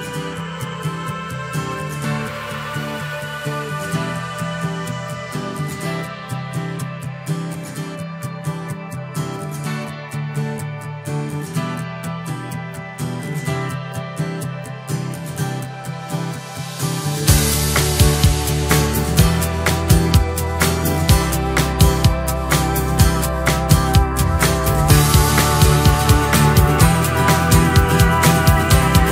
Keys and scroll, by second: 1.4 Delete, 1.9 Return, 2.0 Escape, 2.7 Delete, 3.3 Escape, 9.6 Return, 10.0 Escape, 15.0 Return, 15.7 Escape, 19.0 Return, 20.0 Escape, 21.0 Return, 21.2 Escape, 23.1 Return, 24.2 Escape, 24.7 alt+7, 25.1 Escape, 26.5 Return.